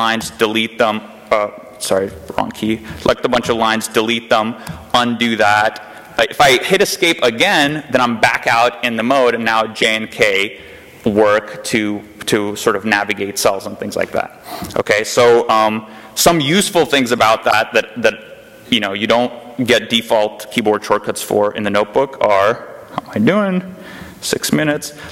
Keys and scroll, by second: 1.6-3.3 typing, 4.5 u, 7.4 Escape, 9.0-13.6 typing, 24.4 g, 24.5 g.